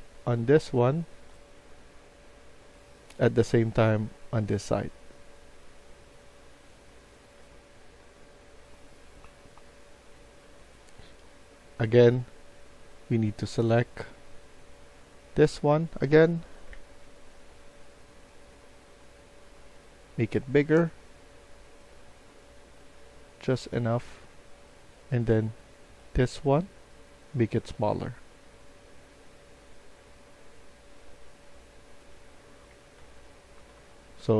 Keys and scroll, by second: 8.8 Escape, 16.6 Tab, 32.6 Escape, 32.9 Escape, 33.5-34.3 typing.